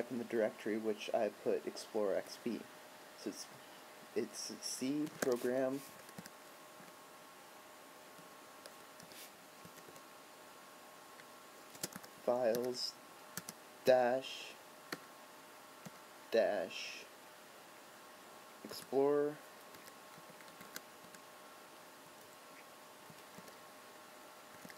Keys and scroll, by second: 7.0 BackSpace, 8.3 BackSpace, 11.9 space, 15.1 BackSpace, 20.5 BackSpace, 20.7 BackSpace.